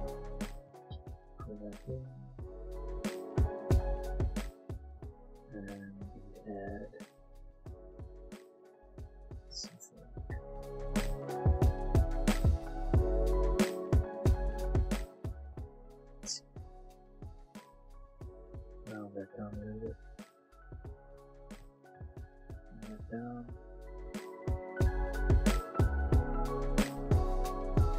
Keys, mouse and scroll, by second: 0.6 a, 1.0 l, 1.5 click, 2.8 a, 3.2 l, 3.8 click, 4.4 Tab, 4.6 middle click, 5.5 click, 5.8 middle click, 6.0 Tab, 6.6 click, 6.9 middle click, 7.8 ctrl+r, 8.1 click, 8.9 middle click, 10.9 click, 12.7 shift+click, 12.9 middle click, 13.2 shift+e, 13.7 click, 13.9 click, 15.8 click, 16.8 alt+click, 17.8 alt+shift+click, 18.4 alt+click, 18.5 click, 20.8 alt+click, 21.6 ctrl+alt+shift+z, 22.5 click, 23.8 alt+shift+Caps_Lock, 24.2 middle click, 24.7 middle click, 24.9 middle click, 25.4 middle click, 25.4 a, 25.5 a, 25.7 b, 25.8 click, 26.3 b, 26.6 click, 27.4 shift+click, 27.5 click.